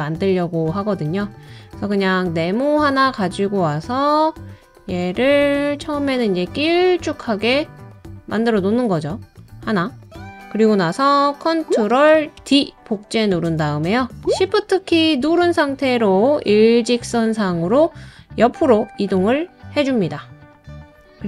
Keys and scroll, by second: 12.4 super+d.